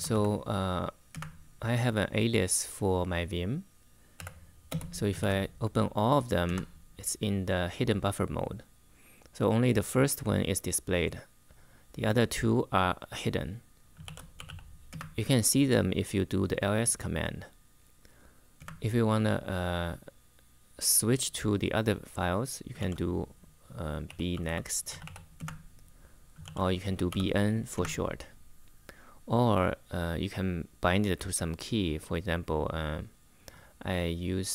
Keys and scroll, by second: 0.0-0.4 typing, 0.9 Return, 3.9 v, 4.4 space, 4.9 shift+8, 6.2 Return, 13.5-14.7 typing, 18.3 Return, 22.5 shift+;, 23.6-27.1 typing, 27.5 Return.